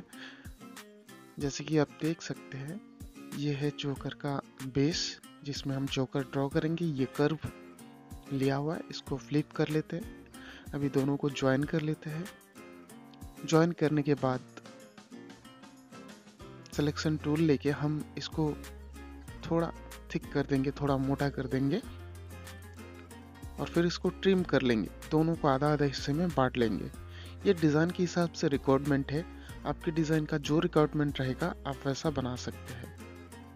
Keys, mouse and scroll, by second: 1.6 space, 2.6-3.1 scroll up 1, 5.0 click, 7.7 m, 8.7 shift+click, 10.0 j, 11.2 click, 13.1 space, 14.5 click, 21.9 ctrl+shift+q, 24.4 shift+click, 32.3 ctrl+k.